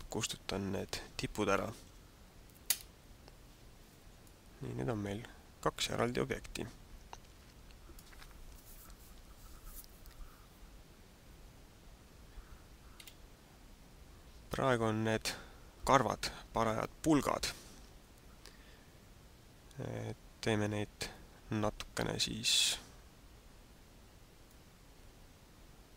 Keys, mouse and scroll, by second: 1.8 x, 3.5 Tab, 4.1 middle click, 13.0 KP_1, 13.7-14.0 scroll down 4, 24.6 click.